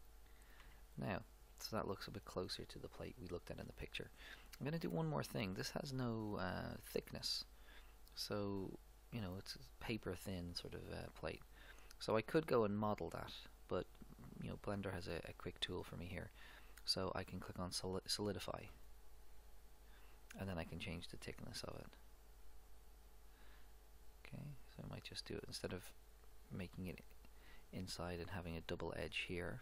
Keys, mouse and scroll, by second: 0.6 Tab, 4.8-7.2 middle drag, 8.4-10.7 middle drag, 15.3-17.1 drag, 20.8-22.5 drag.